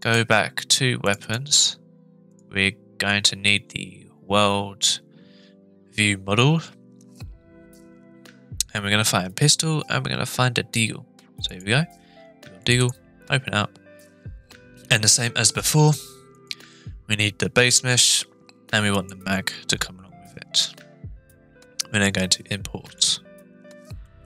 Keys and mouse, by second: 24.0-24.2 middle drag.